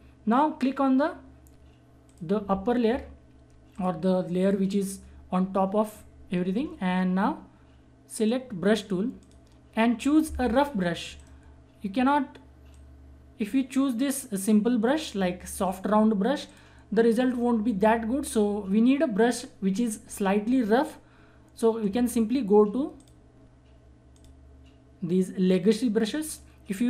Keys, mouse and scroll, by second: 2.0 click, 8.2 click, 8.2 click, 11.1 right click, 11.2 right click, 12.7-14.4 drag, 22.9 click.